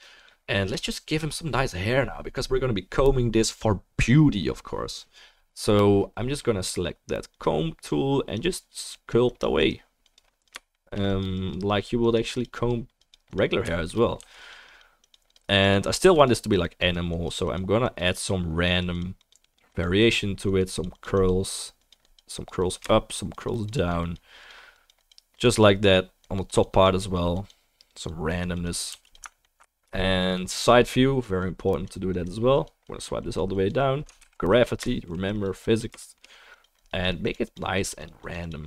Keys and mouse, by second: 0.2 click, 0.2-16.8 right drag, 7.3-14.5 drag, 9.0-16.8 middle drag, 14.2 f, 14.7-16.2 drag, 16.0 f, 16.5 drag, 28.4-29.1 drag, 28.4-29.4 middle drag, 28.4-38.6 right drag, 28.9 f, 29.9-35.3 middle drag, 31.2-38.6 drag, 34.2 ctrl+z.